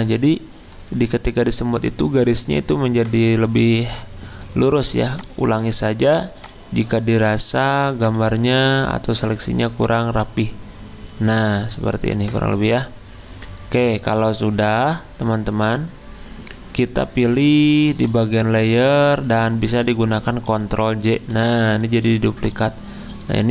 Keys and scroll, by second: 20.7 ctrl+j.